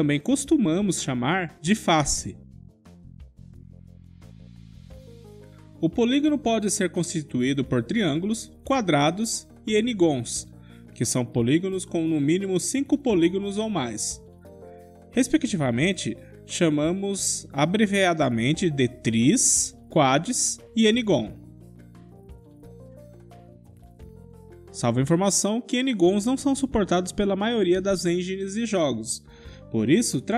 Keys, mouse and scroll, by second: 1.3-3.4 middle drag, 2.7 KP_5, 3.5-7.0 middle drag, 7.0 click, 8.4 4, 8.4 3, 8.5-11.6 drag, 9.7 KP_5, 11.6-12.9 middle drag, 16.7 3, 17.2-19.2 middle drag, 20.6-22.3 middle drag, 22.3-23.6 drag, 27.6 click, 27.7 middle click, 27.9 click, 28.0 middle click, 28.3 click, 28.5-30.2 middle drag.